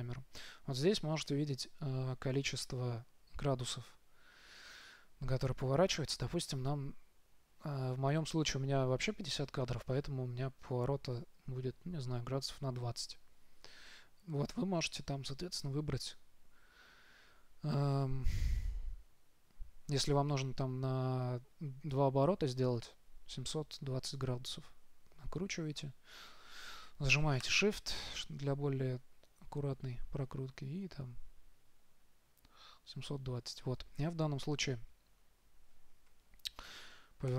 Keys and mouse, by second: 36.9 r.